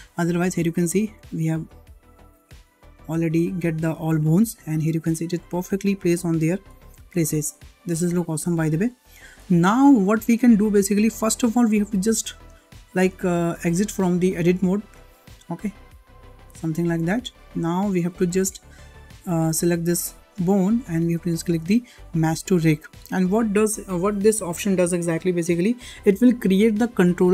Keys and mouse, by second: 1.4 middle click, 2.4-3.7 middle drag, 5.6 middle click, 6.7 shift+middle click, 7.1 middle click, 8.9 shift+middle click, 15.8-16.5 drag, 20.7-21.0 shift+middle drag.